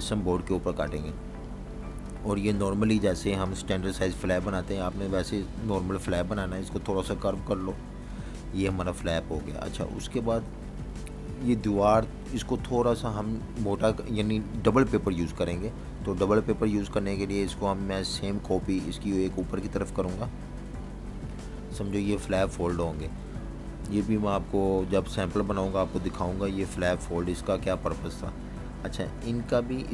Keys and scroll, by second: 0.4-1.6 typing, 5.4 Page_Down, 7.3 Page_Up, 8.0 super+-, 8.8 v, 9.0 space, 10.4 super+-, 11.0 v, 13.8-15.1 typing, 21.0 z, 22.2 v, 22.8 space, 24.7 super+-, 25.5-26.1 typing, 26.6 super+-, 27.2 v.